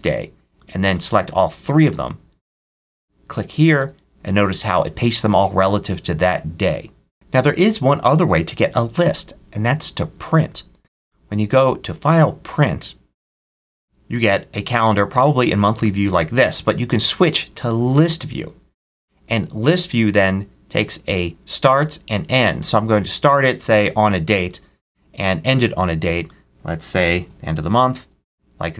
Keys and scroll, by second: 1.8 super+c, 3.6 super+v, 26.8-27.6 typing, 28.1 Tab.